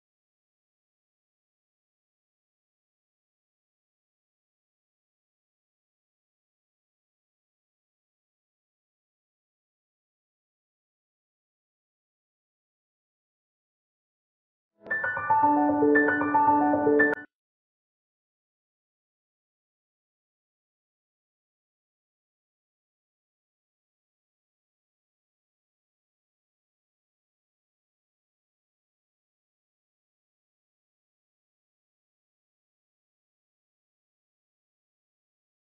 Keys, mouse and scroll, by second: 0.4-0.9 scroll down 1, 0.9-1.9 scroll up 1, 3.3 click, 3.6 scroll down 1, 5.2 scroll up 1, 5.7 click, 6.0 right click, 6.2 scroll down 1, 6.6 scroll up 1, 7.2-9.9 drag, 9.9 scroll down 1, 10.1 scroll up 1, 10.7 click, 11.8 scroll down 1, 12.2 scroll up 1, 12.8-15.1 drag, 15.1 scroll down 1, 15.3-15.6 scroll up 1, 15.6-19.3 drag, 19.3 scroll down 1, 19.6-19.9 scroll up 1, 20.1 click, 21.1 scroll down 1, 21.5 scroll up 1, 21.8 scroll down 1, 22.0-22.4 scroll up 1, 22.6 scroll down 1, 22.9-23.2 scroll up 1, 23.4 scroll down 1, 24.0 scroll up 1, 24.4 click, 24.9 right click, 27.3 click, 28.1-28.9 scroll up 1, 28.9 scroll down 1, 29.4 scroll up 1, 30.3 click, 30.7 scroll down 1, 31.4-32.4 scroll up 1, 33.0 scroll up 1, 33.3 alt+click, 35.1 alt+click.